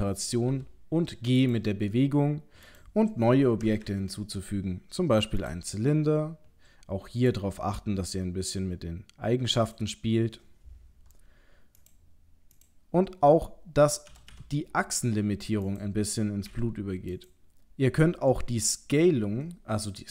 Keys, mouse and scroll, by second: 0.5 g, 1.8-2.7 scroll down 3, 2.7 click, 3.8 shift+a, 7.3 click, 11.8 click, 12.6 click, 14.1 g, 16.5 g.